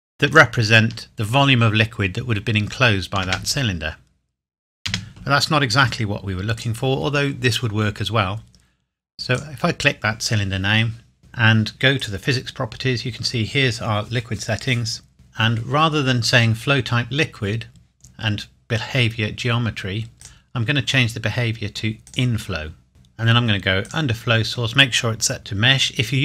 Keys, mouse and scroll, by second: 0.3 click, 3.8 space, 6.6 click, 9.4 click, 12.0 click, 20.2 click, 23.8 click.